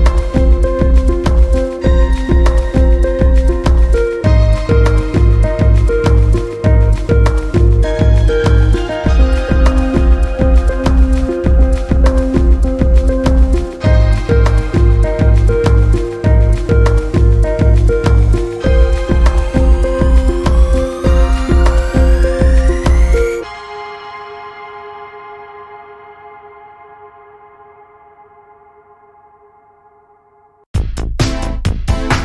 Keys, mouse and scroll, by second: 0.1 Tab, 0.2 scroll down 1, 0.3-1.1 middle drag, 1.1 scroll up 4, 1.3 middle click, 2.6-3.1 shift+middle drag, 3.1-3.6 scroll up 1, 4.4 Tab, 4.8 middle click, 5.4 click, 5.7 scroll down 1, 6.7 KP_Decimal, 7.0-7.5 scroll down 11, 7.9-10.6 middle drag, 10.6 g, 14.1 Tab, 14.2 scroll down 5, 14.5-16.0 middle drag, 16.0 scroll up 1, 16.2-16.7 middle drag, 16.7 scroll up 3, 17.0-17.6 shift+middle drag, 17.6 Tab, 18.3 click, 19.1 g, 20.5 click, 20.8 g, 21.4 scroll down 3, 21.6-23.7 middle drag, 23.7 click, 24.4 g, 27.4-28.5 middle drag, 28.5 click, 29.1 g, 30.1 click, 30.3 g, 31.1 middle click, 31.7 click, 32.0 g.